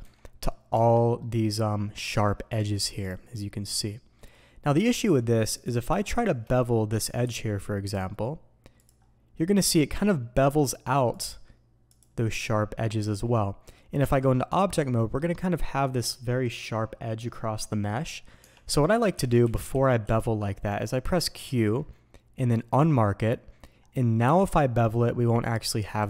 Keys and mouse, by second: 22.7-26.0 drag.